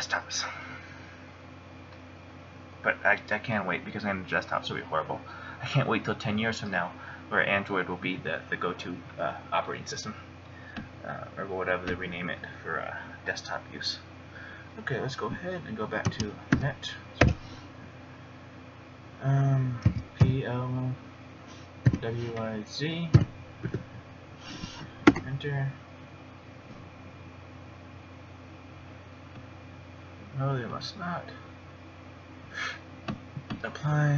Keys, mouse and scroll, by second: 12.2 click, 31.0 click.